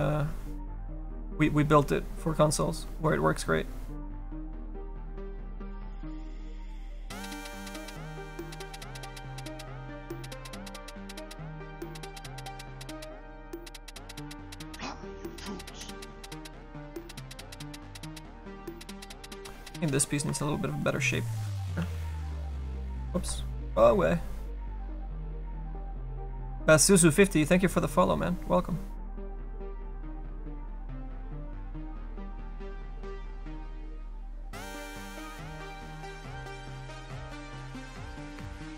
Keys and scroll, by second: 21.8 s, 23.2 ctrl+z.